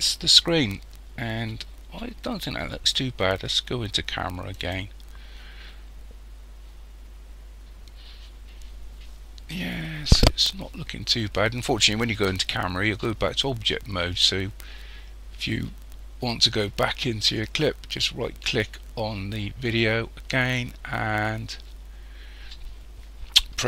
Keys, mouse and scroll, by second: 4.5 click, 6.4-6.9 scroll up 1, 7.6 scroll up 1, 18.0 right click, 20.4 scroll down 1.